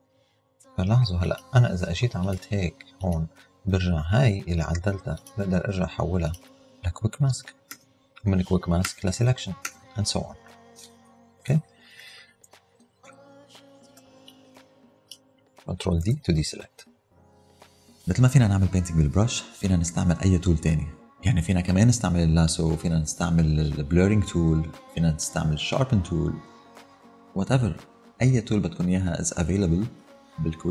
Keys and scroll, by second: 7.7 q, 8.9 p, 11.5 super+-, 14.3 space, 16.1 super+d.